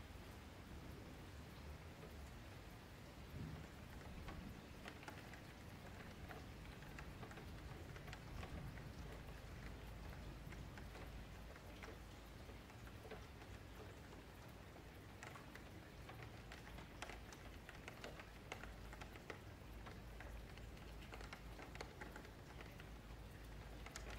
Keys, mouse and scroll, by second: 0.2 F3, 0.4 middle click, 0.9 scroll up 3, 1.1 Tab, 1.4-1.7 scroll down 4, 1.7 click, 2.9 KP_Divide, 3.1-3.9 scroll up 12, 3.9 shift+middle click, 4.7 scroll up 1, 4.9-5.9 middle drag, 5.9 Tab, 6.3 3, 6.4 click, 6.9 middle click, 7.2 scroll down 6, 7.5 scroll up 1, 7.7 shift+middle click, 8.5 scroll up 3, 8.7 middle click, 9.3 scroll up 1, 9.4 middle click, 10.0 scroll up 3, 10.2-11.3 shift+middle drag, 11.3 s, 16.2 scroll down 3, 16.3-18.0 middle drag, 18.0 F3, 18.3-21.3 middle drag, 21.3 Tab, 22.4 KP_Divide, 22.9-23.3 middle drag, 23.3-23.8 scroll up 5, 23.5 F3, 23.8-24.1 middle drag.